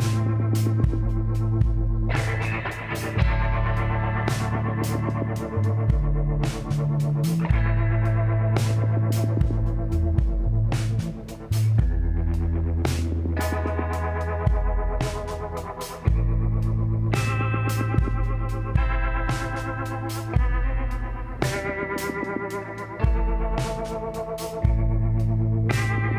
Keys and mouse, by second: 5.7 l, 12.6-14.4 drag, 13.7 l, 14.6 s, 18.7-20.4 drag, 20.6-22.4 middle drag, 22.8 middle click, 23.7-25.4 drag, 24.5 l, 25.7 z.